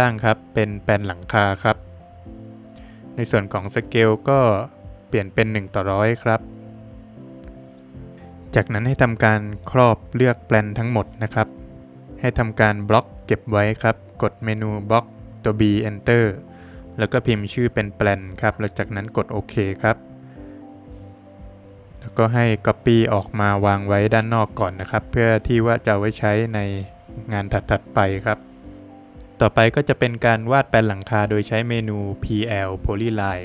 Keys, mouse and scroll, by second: 3.2 click, 3.8 Escape, 4.4 click, 7.5 Return, 8.1 Escape, 8.1 middle click, 8.2 scroll down 1, 8.5 middle click, 9.2 click, 11.8 click, 12.2 space, 13.9 shift+p, 14.7 space, 17.1 Return, 18.8 Escape, 19.3 click, 19.7 scroll down 2, 20.0 middle click, 21.1 space, 21.6 click, 21.7 scroll down 2, 21.9 middle click, 23.1 click, 24.1 Escape, 26.1 scroll up 2, 26.8-27.4 scroll up 2, 26.8 middle click, 27.0 Escape, 28.1 middle click, 30.0 space, 30.4 scroll up 1, 31.4 scroll up 2, 32.2 click, 32.6 scroll up 3.